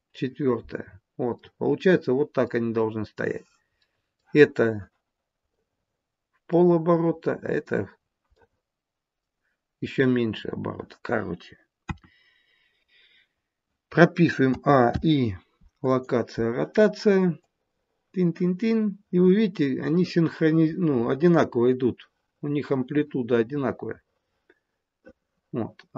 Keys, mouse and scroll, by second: 1.4 middle click, 2.6 scroll up 2, 3.6 scroll up 1, 3.8 middle click, 5.4 middle click, 7.9-8.3 scroll down 2, 8.3 middle click, 11.7 KP_1, 14.5 a, 14.8 i, 17.5 click.